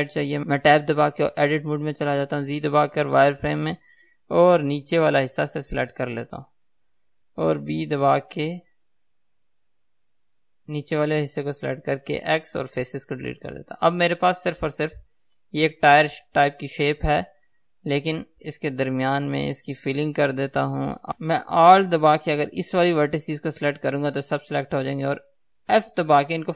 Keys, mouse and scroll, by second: 0.5 Tab, 3.6-5.4 right drag, 3.6 z, 5.4 click, 10.6 b, 12.8 x, 13.6-21.2 middle drag, 15.5 Tab, 17.9 z, 19.4 Tab, 20.4-20.7 scroll up 1, 21.2 alt+a, 23.2 alt+click, 26.3 f.